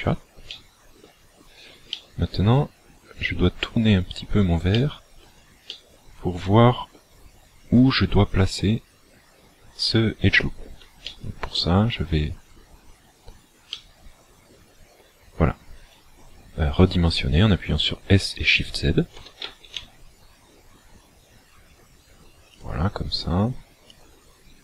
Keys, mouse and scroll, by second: 0.6 shift+middle click, 1.9 middle click, 4.8 shift+middle click, 5.7 middle click, 8.3 click, 11.1 shift+middle click, 13.6 middle click, 19.2 s, 22.6 click, 23.8 click.